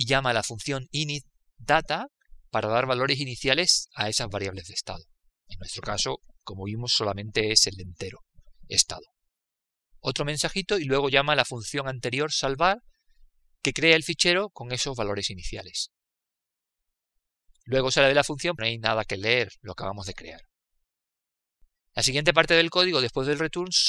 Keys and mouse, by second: 1.1 click, 11.6-14.5 drag, 18.2 click.